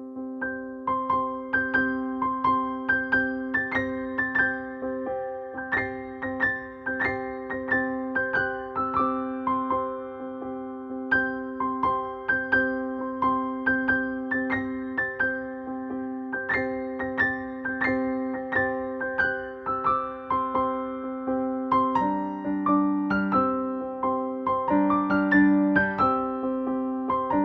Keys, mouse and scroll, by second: 0.1 Left, 6.0-8.8 drag, 10.6 ctrl+space, 10.7 ctrl+click, 11.0 ctrl+space, 12.1-16.2 drag, 17.8 click, 19.5 5, 22.6 click, 23.3 5, 24.4 click, 25.3 ctrl+space, 25.6 ctrl+click, 25.7 ctrl+space.